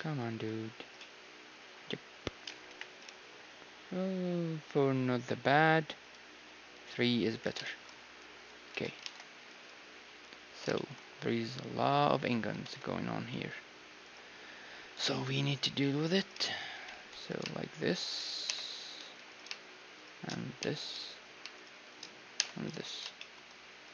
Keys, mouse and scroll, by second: 2.6 KP_1, 3.1 t, 6.0-7.9 drag, 7.3-8.7 middle drag, 7.4 t, 8.7 a, 9.0 ctrl+Tab, 10.0-10.6 scroll down 1, 10.8-11.9 scroll down 1, 11.9-14.0 scroll down 1, 14.0 ctrl+Tab, 14.0-16.0 right drag, 16.7-23.3 right drag, 16.7 w, 18.4 j, 18.9 a, 20.6 j, 22.3 j, 22.6 a, 23.2-23.9 drag, 23.8-23.9 right drag.